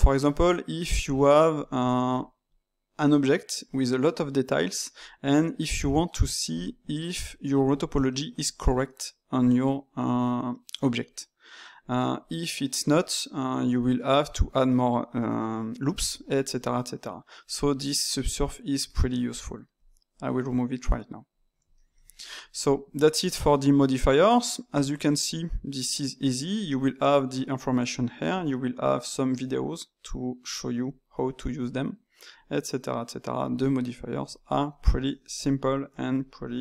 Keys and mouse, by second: 19.8-21.7 drag, 21.7-24.6 ctrl+shift+middle drag, 24.6 click, 25.7 click, 26.5-29.7 drag, 34.4-36.6 ctrl+middle drag.